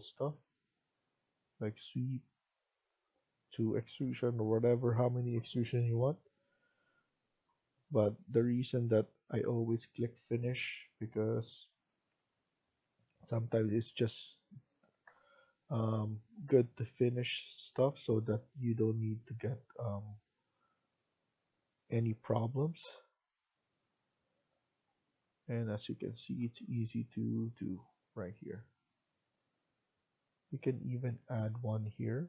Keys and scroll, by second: 14.5-15.5 typing.